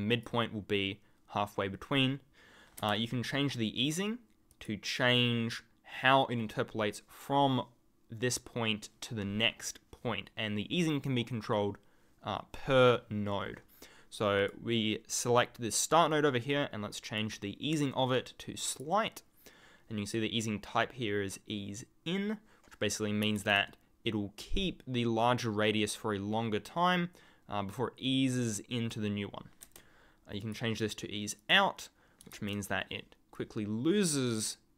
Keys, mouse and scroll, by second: 4.5 alt+click, 14.4 alt+click, 17.0 alt+click, 18.6 alt+click, 30.4 alt+click.